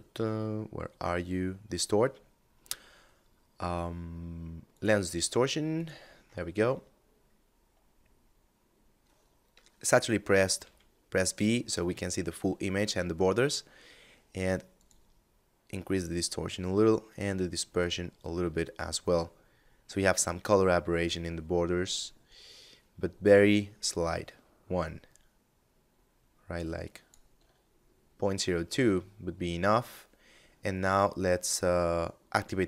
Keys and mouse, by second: 3.9 click, 9.7 v, 13.9 click, 16.9 click, 20.3 shift+click, 31.5 click.